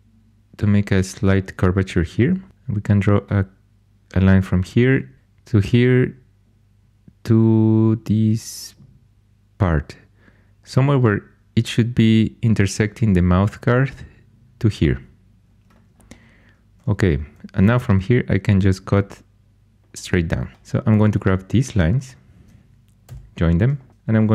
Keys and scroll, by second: 2.2-3.0 typing, 17.5 shift+a, 20.5 2, 23.0 j.